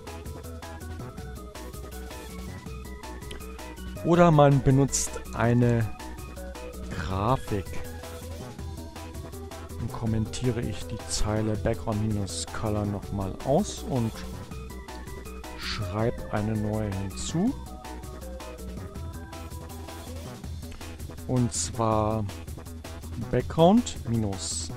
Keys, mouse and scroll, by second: 4.2 click, 6.0-7.4 typing, 7.9 Right, 8.4 Right, 9.7 space, 10.5 7, 10.7 Left, 13.2 Right, 13.6 shift+7, 15.3 space, 16.0 Down, 16.2 Left, 16.9 Return, 17.6 space, 19.1 Up, 19.8-23.7 typing.